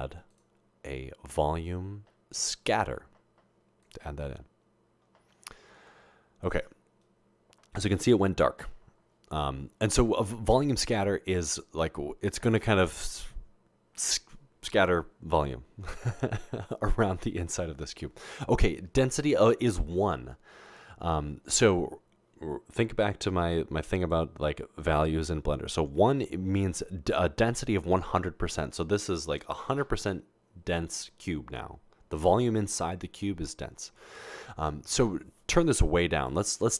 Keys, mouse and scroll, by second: 0.3 click, 3.8 click, 10.5 click, 11.5 click, 24.0 click, 36.2 click.